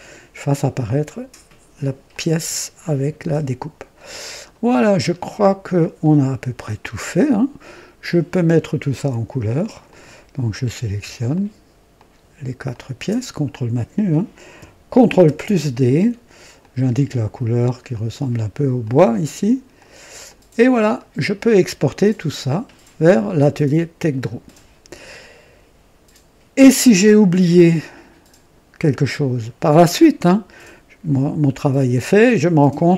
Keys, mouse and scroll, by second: 0.9 click, 2.0-4.6 drag, 4.7 scroll up 1, 5.3 right click, 5.9-8.7 drag, 9.8 click, 10.9 typing, 11.3 ctrl+click, 11.9 ctrl+click, 12.6 ctrl+click, 15.2 ctrl+d, 15.2 typing, 16.5 click, 17.8 click, 18.7 click, 19.7 click, 20.2 click, 20.9-22.8 drag, 23.4-28.7 drag.